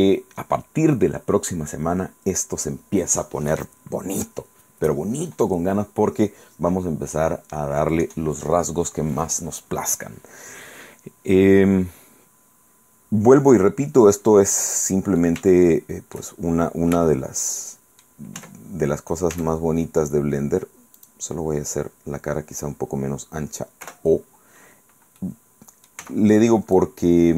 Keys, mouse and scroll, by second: 14.3 scroll up 2, 14.7 scroll down 2, 15.3-16.5 shift+middle drag, 17.2-18.3 shift+drag, 18.5 Tab, 19.5 a, 21.1 click, 23.9 o, 25.3 middle click, 26.1 b, 26.9-27.3 drag.